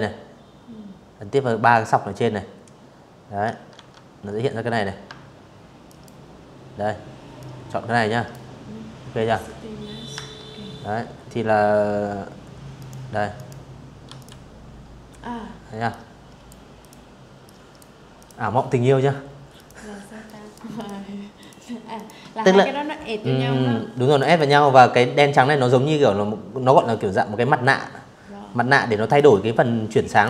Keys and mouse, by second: 1.4 ctrl+1, 3.5 ctrl+click, 5.0 ctrl+click, 7.8 Escape, 10.4 click, 11.0 click, 11.7 v, 11.8 click, 13.5 click, 14.5 click, 15.1 click, 15.8 click, 17.2 click, 17.9 click, 18.4 click, 19.1 click, 19.6 click, 21.7 click, 22.0 click, 26.7 click, 27.8 click.